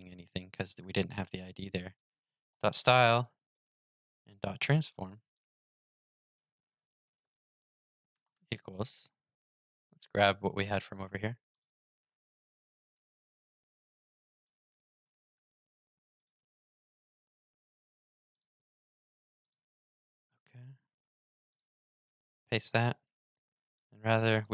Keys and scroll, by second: 14.8 super+c, 21.8 super+v.